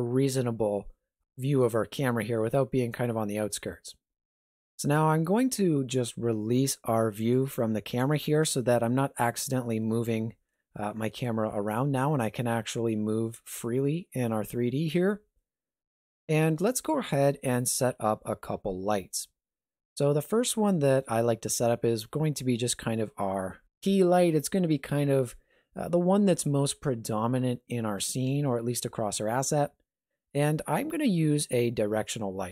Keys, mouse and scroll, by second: 4.6 click, 5.1 n, 7.2 click, 8.0 n, 9.8 middle click, 14.5 shift+middle click, 15.1 ctrl+middle click, 16.5 middle click, 17.2 ctrl+middle click, 20.0 middle click, 20.5 shift+middle click.